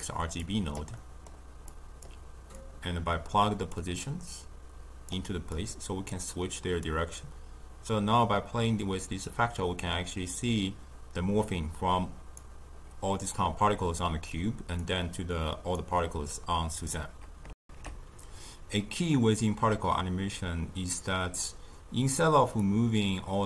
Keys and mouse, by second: 5.0-9.8 drag, 14.9-17.5 drag, 17.5 alt+shift+q, 22.5-23.4 drag.